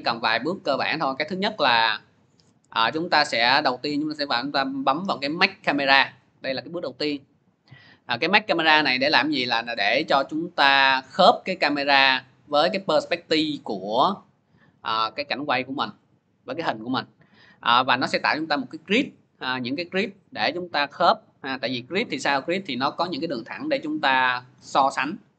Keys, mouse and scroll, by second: 6.5-14.6 drag, 16.0-23.3 middle drag.